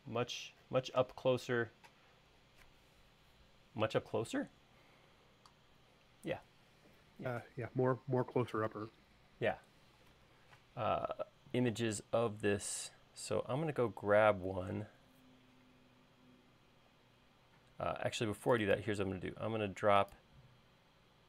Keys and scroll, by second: 19.1 l.